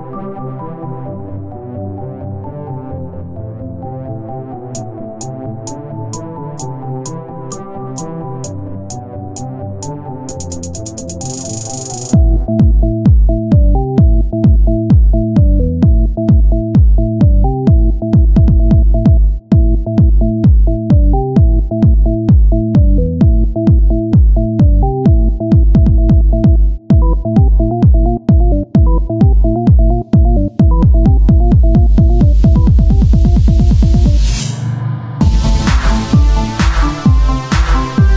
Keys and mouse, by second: 0.8 click, 1.5 z, 4.3 o, 5.5 ctrl+r, 9.4-10.9 drag, 9.7 Tab, 10.9-13.0 right drag, 13.0-17.7 drag, 17.7 Tab, 18.2 Tab, 19.0 Tab, 19.6 a, 20.5 s, 21.9-25.0 drag, 25.0 s, 28.1 Tab, 30.7-32.5 drag, 34.5 right click, 34.7 Tab, 35.9 z, 37.7 o.